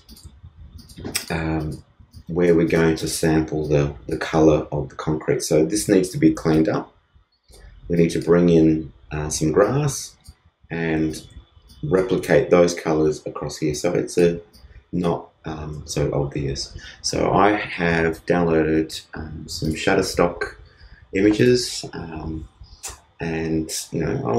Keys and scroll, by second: 2.1 alt+space.